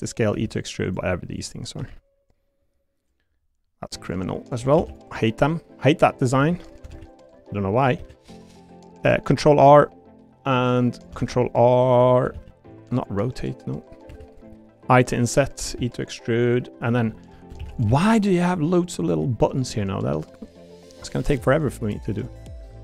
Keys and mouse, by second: 0.2 click, 0.3 e, 0.8 click, 1.8 l, 2.3 click, 4.8 shift+d, 5.4 click, 6.4 3, 6.9 ctrl+r, 8.0 r, 8.1 click, 9.2 ctrl+r, 10.9 click, 11.2 r, 12.3 ctrl+r, 13.9 click, 14.1 3, 15.1 i, 15.6 click, 15.7 e, 16.4 click, 17.1 click, 17.4 e, 17.6 shift+d, 17.8 s, 19.0 click, 19.6 e, 20.6 click, 21.1 l.